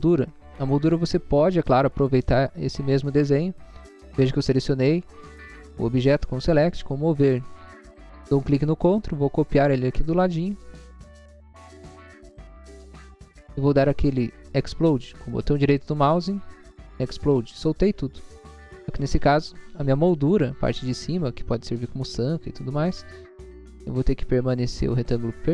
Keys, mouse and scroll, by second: 0.1 middle click, 1.0 scroll up 1, 1.5 middle click, 3.8 click, 6.4 click, 7.5 click, 9.0 click, 9.3 scroll down 1, 12.7 click, 13.2 scroll down 1, 13.9 scroll up 1, 15.0 middle click, 15.4 middle click, 15.8 right click, 17.3 click, 18.6 click, 18.9 scroll down 1, 22.8-23.3 scroll up 2, 23.5 click, 23.8 click, 24.2 click, 25.0 click.